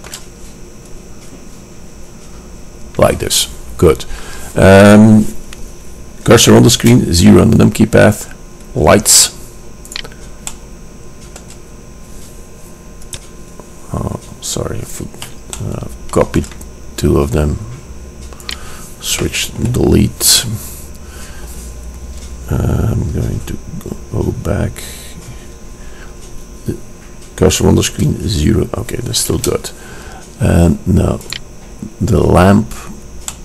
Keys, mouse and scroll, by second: 7.0 KP_0, 10.0-10.4 drag, 10.4-11.0 right drag, 11.0-12.0 drag, 14.0-17.7 middle drag, 18.6 click, 19.7 Delete, 25.3-28.0 drag, 28.0 KP_0, 29.5 KP_0, 31.5-33.2 drag.